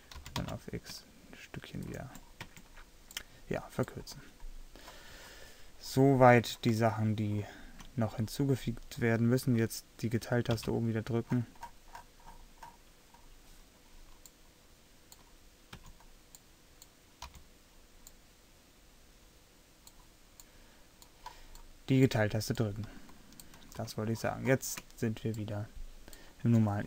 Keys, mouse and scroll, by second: 0.3 g, 2.6 Tab, 10.7 KP_Divide, 15.8 a, 17.3 z.